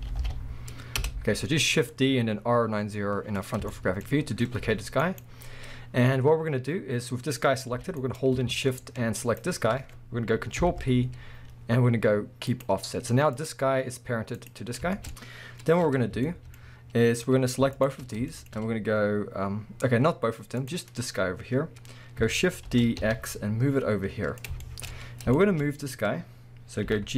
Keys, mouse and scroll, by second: 1.1 Return, 3.7-5.2 shift+middle drag, 4.6 g, 5.2 right click, 7.7 g, 8.2 right click, 9.2 shift+click, 10.6 ctrl+p, 12.9 scroll down 1, 13.4 click, 14.4 click, 14.9-17.7 shift+middle drag, 16.6-17.7 scroll up 2, 17.7 shift+click, 18.0-18.3 scroll down 2, 18.3-20.6 shift+middle drag, 19.6-20.6 scroll up 2, 20.6 click, 22.7 shift+d, 24.4 click, 24.6-27.1 shift+middle drag, 24.9-25.3 scroll up 2, 25.7 scroll up 1, 26.9 g.